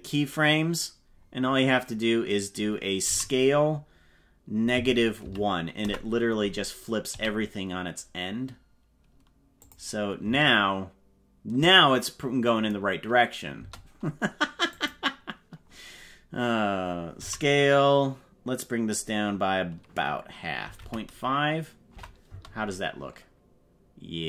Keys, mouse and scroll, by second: 3.2 s, 7.2 g, 10.2 space, 13.6 space, 14.7 click, 17.1 s, 22.2 space.